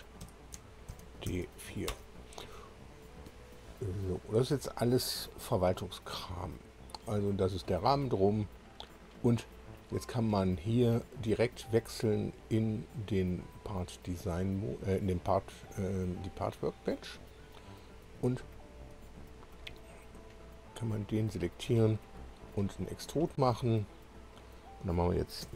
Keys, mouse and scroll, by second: 0.2 F2, 0.9 shift+d, 1.5 4, 1.9 Return, 2.9-3.3 scroll up 2, 3.8-4.1 scroll down 2, 6.0 click, 12.0 click, 16.1 click, 17.1 click, 18.3-19.7 shift+drag, 20.6 click, 22.8 click, 25.4 -.